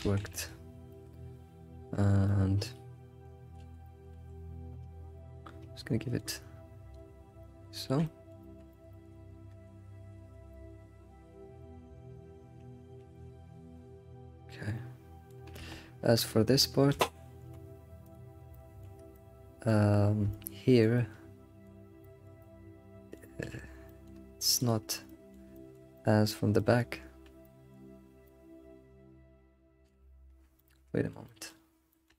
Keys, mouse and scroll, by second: 0.0 alt+shift+z, 0.3-0.6 middle drag, 0.9-3.6 shift+middle drag, 3.6 alt+shift+z, 3.8 middle click, 4.1 alt+shift+z, 5.7 alt+shift+z, 6.4-7.8 drag, 7.1 scroll down 2, 7.4 middle click, 7.8 alt+shift+z, 8.0-9.0 middle drag, 9.0 alt+scroll up 2, 9.1 alt+middle drag, 9.8 scroll up 3, 10.5-15.7 shift+middle drag, 12.7 scroll up 3, 17.6 alt+h, 18.1 click, 18.3 scroll down 2, 18.5-24.7 shift+middle drag, 24.9 ctrl+click, 25.0-30.0 middle drag, 30.1 scroll down 5, 30.6-32.1 shift+middle drag.